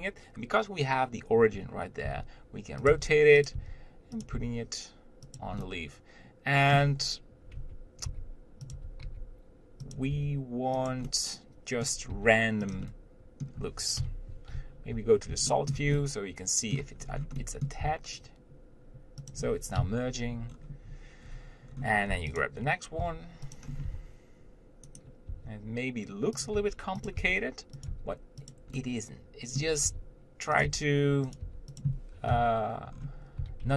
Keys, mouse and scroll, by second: 2.3 r, 3.1 g, 3.8 r, 4.6 g, 5.8-7.2 middle drag, 7.2-7.8 scroll up 1, 7.8 Tab, 8.3 g, 9.0 Tab, 9.3 g, 10.4 r, 11.3-12.4 middle drag, 12.4 g, 13.1-14.2 middle drag, 15.2 z, 15.7-17.2 shift+middle drag, 17.2-17.7 scroll up 1, 17.7 middle click, 18.1 g, 20.8 scroll down 1, 22.7 click, 23.2 g, 23.9 scroll up 1, 24.1 r, 25.6 r, 26.8 g, 27.4 r, 28.2 g, 29.0-30.1 middle drag, 30.1 r, 30.9 g, 31.7 r, 33.2 scroll up 1, 33.6 g.